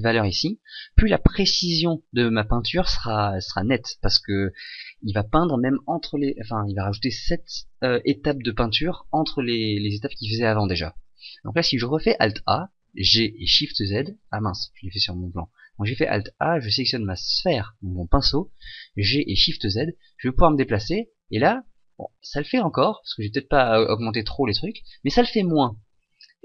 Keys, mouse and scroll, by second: 12.1 alt+a, 12.9 g, 15.3 right click, 18.6 g.